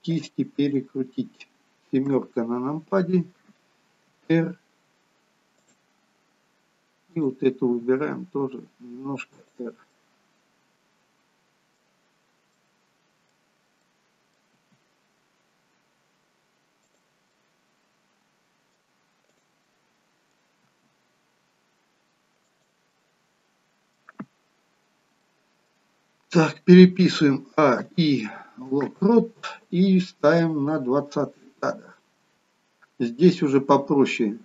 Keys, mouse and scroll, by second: 0.3 click, 1.0-2.0 scroll down 2, 2.2-4.0 scroll down 1, 2.2 KP_7, 5.1 r, 6.1-7.1 scroll up 3, 7.1-7.7 scroll up 1, 7.7 click, 7.7 r, 9.9 middle click, 12.3 scroll down 3, 12.6 middle click, 13.9 middle click, 14.7 r, 17.5 middle click, 19.3 click, 19.7 middle click, 20.6 r, 22.9 middle click, 24.8-25.3 scroll down 2, 25.3 middle click, 28.1 a, 28.1 i, 30.6 click.